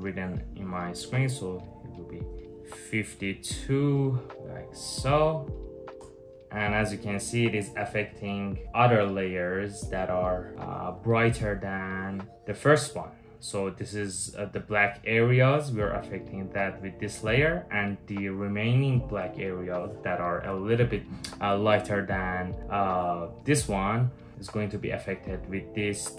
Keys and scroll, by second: 5.6 Return, 6.7 typing, 25.9 typing.